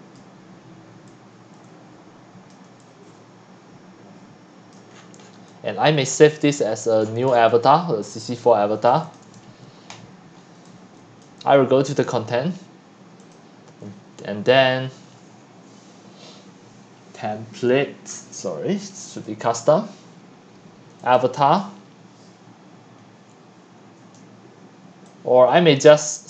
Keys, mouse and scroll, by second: 0.0-0.3 typing, 0.1 click, 2.5 click, 2.7-7.9 typing, 4.7 click, 6.8 click, 7.1 scroll, 7.3 scroll, 8.2-9.0 drag, 9.9-10.6 scroll down 13, 10.3-11.5 typing, 11.3-11.6 drag, 13.2 click, 15.6-18.6 drag, 19.3-25.1 drag, 25.2 click, 25.3 click.